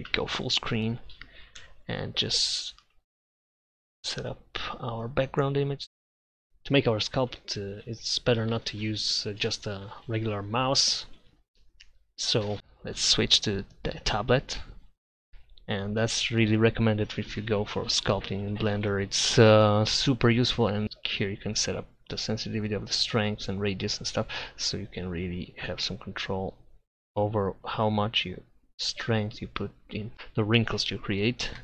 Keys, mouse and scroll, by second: 0.1 ctrl+Up, 1.6 n, 6.1 z, 6.4 Tab, 6.7 Tab, 7.0 z, 7.8-9.1 drag, 9.1 middle click, 9.5 click, 10.4 middle click, 11.0-12.2 drag, 12.5-14.8 middle drag, 25.1-30.1 drag.